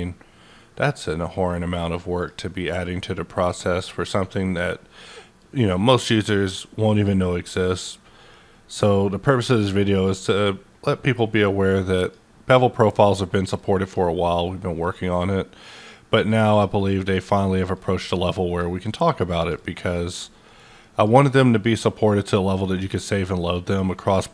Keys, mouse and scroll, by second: 12.9 click, 13.5-17.6 drag, 15.1 click, 16.6 click, 18.0 click, 19.3 click, 19.8-21.1 drag.